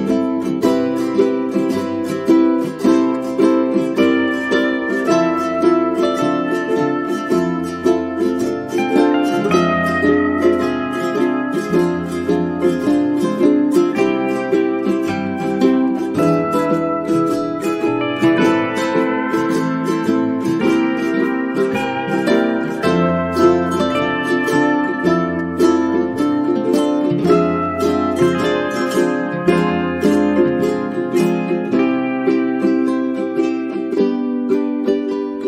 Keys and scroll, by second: 0.7 space, 13.3 p.